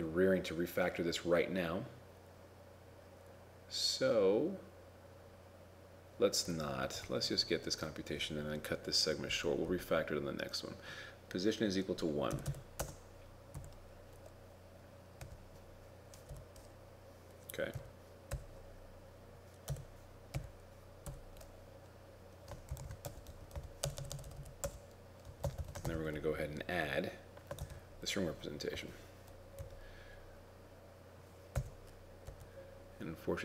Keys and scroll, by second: 22.6-23.5 typing, 26.0 shift+9, 27.6 ctrl+v.